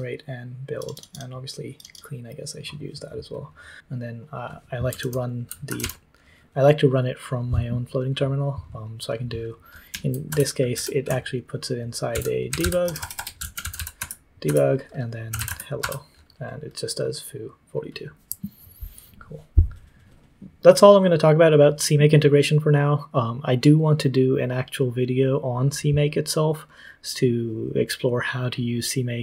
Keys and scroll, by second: 4.9 super+l, 5.4-6.2 typing, 10.2 space, 10.7 BackSpace, 11.8-15.7 typing.